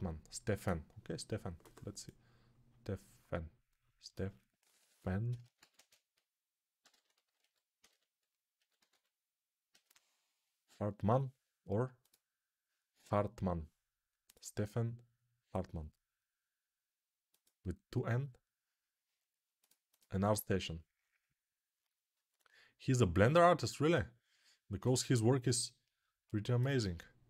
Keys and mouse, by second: 26.7 click.